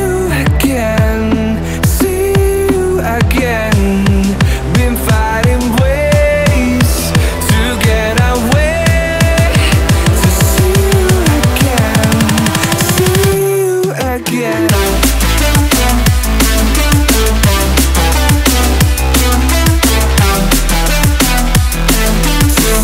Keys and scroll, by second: 0.6 ctrl+u, 3.0 ctrl+u.